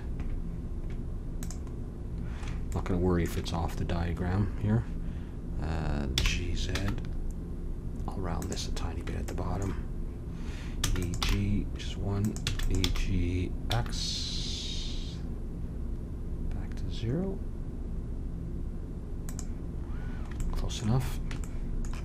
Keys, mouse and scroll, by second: 1.7-2.8 middle drag, 6.1 g, 9.2 middle click, 10.7 e, 11.2 g, 12.4 e, 12.8 g.